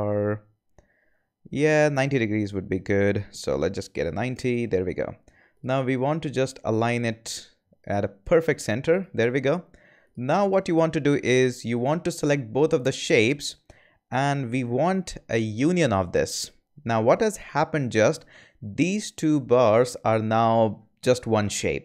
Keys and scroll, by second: 3.6-4.5 typing.